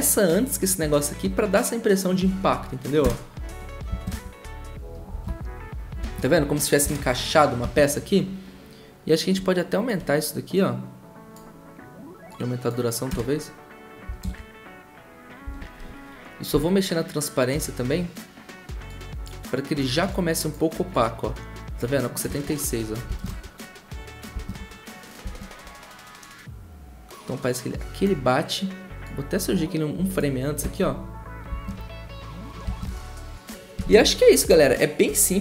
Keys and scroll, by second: 3.0 0, 4.1 0, 5.2 0, 13.1 0, 14.2 typing, 15.4 t, 22.3-24.8 typing, 31.7 typing, 32.8 typing.